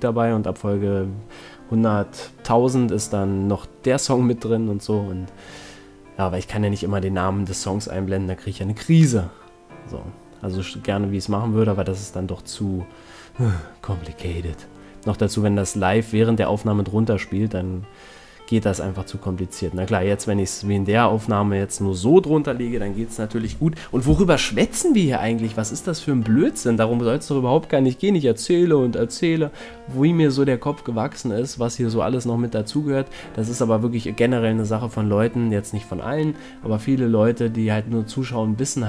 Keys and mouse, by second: 0.5 middle click, 0.8 a, 5.4 middle click, 7.2 click, 8.1 middle click, 8.4 a, 11.8 middle click, 12.3 z, 15.2 middle click, 16.8 middle click, 17.0 ctrl+l, 20.3 z, 21.4 a, 28.3 middle click, 30.0-31.0 middle drag, 35.0 KP_0, 37.6 shift+f.